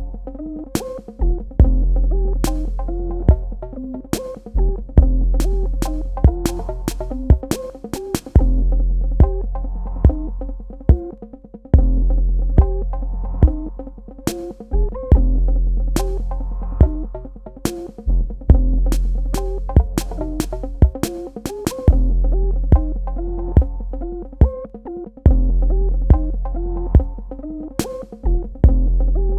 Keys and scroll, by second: 2.4 space, 15.0 space, 24.1 space.